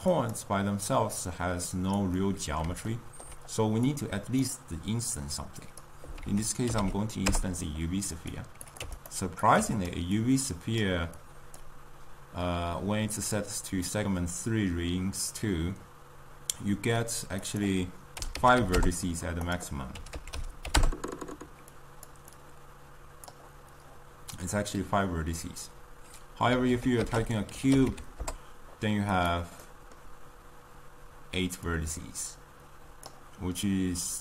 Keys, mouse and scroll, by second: 10.8-23.4 drag, 33.2-34.2 drag.